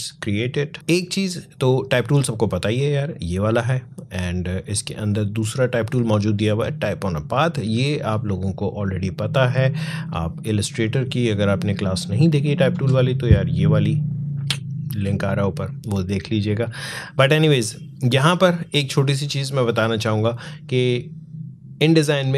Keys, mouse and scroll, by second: 0.7 click, 4.2-18.0 drag.